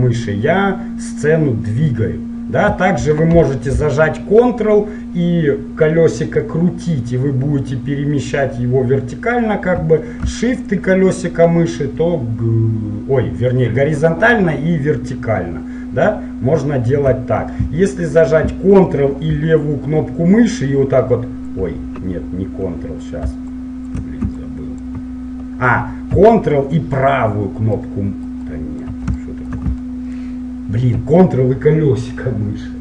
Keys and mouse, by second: 4.2-6.2 middle drag, 10.0-16.9 middle drag, 18.7-20.7 middle drag, 20.7-22.2 ctrl+drag, 22.4 click, 23.7 shift+click, 28.0-31.0 drag, 31.1 middle click.